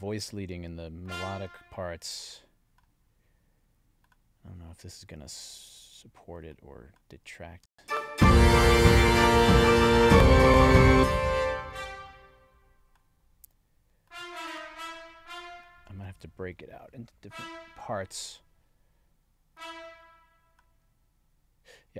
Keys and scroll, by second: 7.6 space, 10.9 space, 17.2 alt+Down.